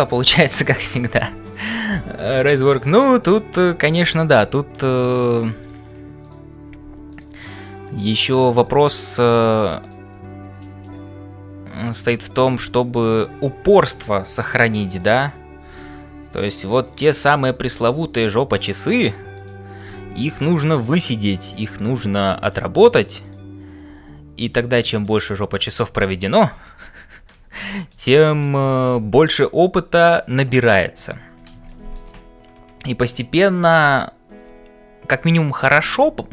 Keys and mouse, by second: 0.0-36.3 typing, 2.3 shift+middle click, 3.3 click, 7.5-8.5 middle drag, 8.6 click, 10.9-12.6 middle drag, 15.0 click, 16.9 click, 24.7 middle click, 25.5 click, 27.7 middle click, 29.0 ctrl+s, 31.6 shift+middle click.